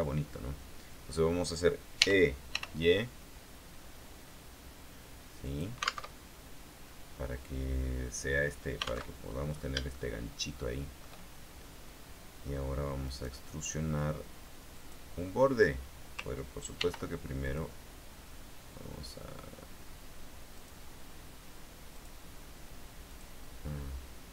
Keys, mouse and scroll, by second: 2.2 e, 2.7 y, 5.6 click, 6.2 alt+Tab, 9.3 alt+Tab, 9.4-10.0 scroll up 3, 10.1-11.3 shift+middle drag, 13.2 right click, 14.9 click, 15.6-16.0 scroll up 2, 16.9 ctrl+r, 17.6 click, 20.7 click, 22.1 click, 23.2 click, 23.8-24.3 middle drag.